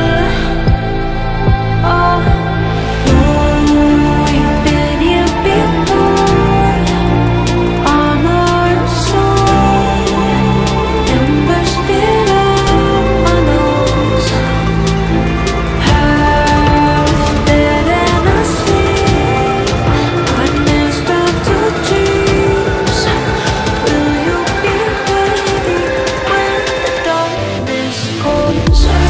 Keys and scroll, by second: 5.8 F3, 21.1 F4, 22.9 F3, 23.9 shift+F2, 24.1 Escape.